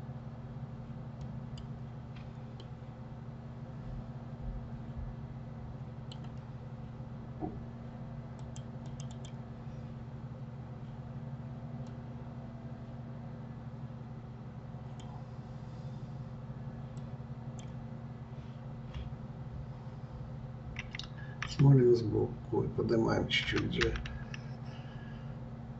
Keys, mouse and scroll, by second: 2.6-5.6 middle drag, 8.4-9.6 drag, 11.9-15.0 drag, 16.9-20.1 drag.